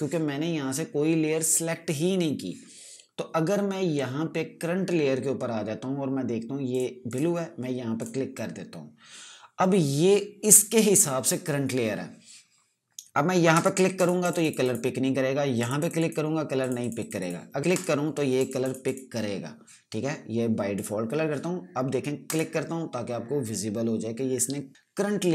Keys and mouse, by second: 7.2 click, 14.0 click.